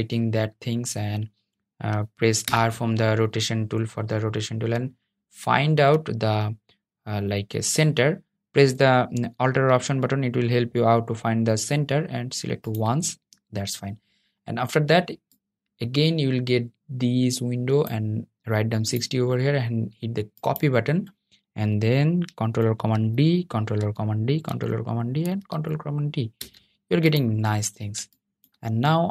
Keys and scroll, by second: 1.7 r, 22.0 super+d, 22.8 super+d, 23.6 super+d, 24.3 super+d.